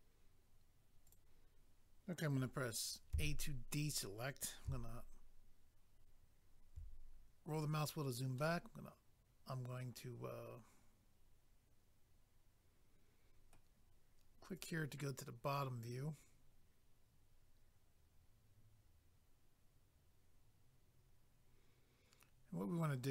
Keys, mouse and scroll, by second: 0.0 click, 1.1 click, 1.1 click, 7.1 scroll down 1, 8.4 middle click, 14.6 click, 14.7 click.